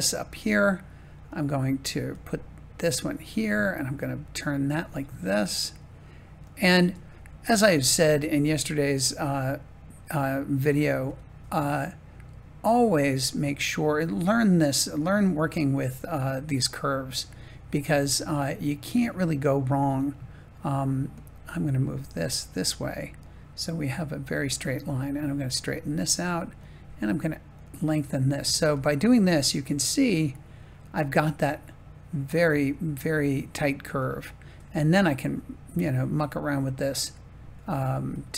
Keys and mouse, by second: 0.0-1.3 drag, 1.9 g, 2.9 click, 3.2 r, 4.7 click, 4.8 g, 5.6 click, 6.7 r, 7.6 click, 7.7 g, 8.4-9.5 drag, 11.0 g, 12.6-13.8 drag, 14.1 r, 14.9-16.9 drag, 17.6-18.9 shift+middle drag, 21.8 g, 22.9-24.3 drag, 24.8 r, 25.9 g, 26.5-27.6 drag, 28.6 g, 32.4-34.0 drag, 34.4 r, 36.9 click.